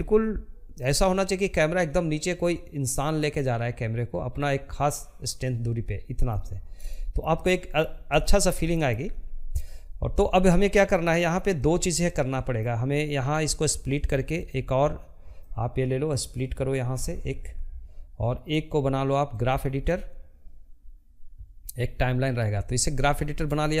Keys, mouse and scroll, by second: 4.6-9.4 shift+middle drag, 9.4-23.8 drag.